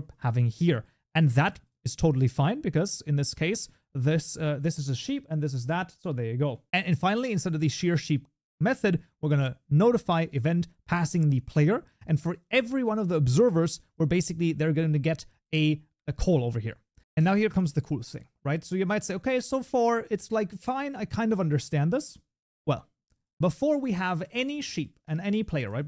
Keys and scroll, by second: 6.7 ctrl+BackSpace, 6.9 ctrl+s, 9.0 Tab, 14.4 ctrl+s.